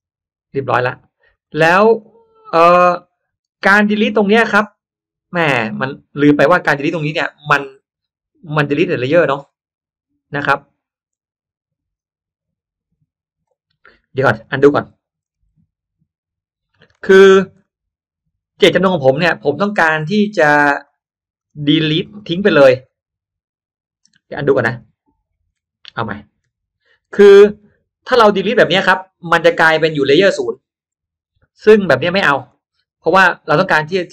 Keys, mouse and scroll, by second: 0.1 click, 1.3 click, 1.9 click, 5.8 click, 9.6 middle click, 10.6 scroll up 1, 14.2 click, 15.2 ctrl+z, 16.8 ctrl+click, 17.6 ctrl+z, 19.6 click, 20.8 drag, 21.3 click, 21.9 drag, 22.3 scroll up 1, 22.9 ctrl+z, 24.3 ctrl+z, 26.3 ctrl+y, 26.7 ctrl+y, 27.1 ctrl+y, 27.6 ctrl+y, 28.3 ctrl+y, 29.5 ctrl+y, 30.0 ctrl+z, 30.2 ctrl+z, 32.4-33.4 drag.